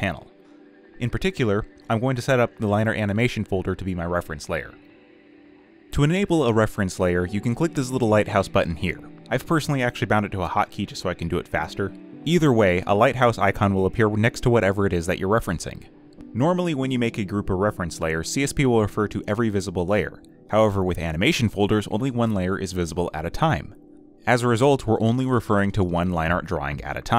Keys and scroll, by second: 16.0 ctrl+h, 16.7 ctrl+shift+h, 19.5 ctrl+h.